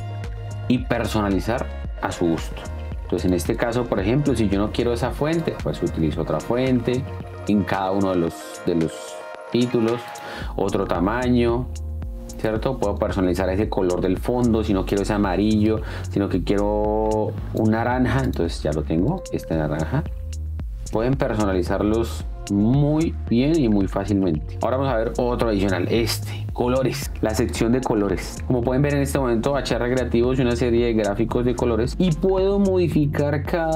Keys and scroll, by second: 19.6 space, 25.1 space.